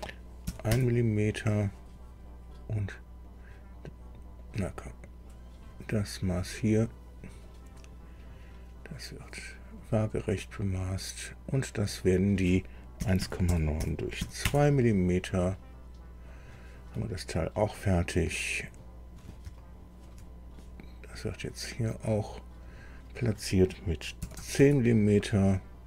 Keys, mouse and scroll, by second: 0.4 KP_1, 0.7 KP_Enter, 1.8-2.1 scroll up 2, 3.2 click, 4.4 click, 5.5 click, 7.1 click, 9.8 click, 11.8 click, 13.0 KP_1, 13.2 KP_Decimal, 13.5 KP_9, 13.8 KP_Divide, 14.2 KP_2, 14.4 KP_Enter, 16.3 click, 18.5 click, 19.1 scroll down 2, 19.6 shift+middle click, 21.2 click, 22.6 click, 24.2 KP_1, 24.4 KP_0, 24.6 KP_Enter, 25.5-25.8 scroll up 2.